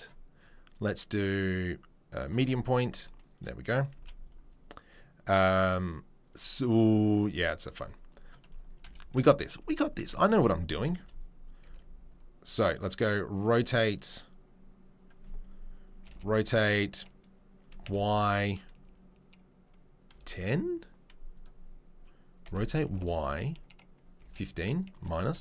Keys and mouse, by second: 2.8-3.3 middle drag, 3.3 right click, 3.3-4.8 middle drag, 4.8 right click, 4.9-6.2 middle drag, 6.2-12.1 right drag, 8.8 KP_3, 9.1 KP_1, 11.6 r, 12.1-25.4 drag, 22.4 r.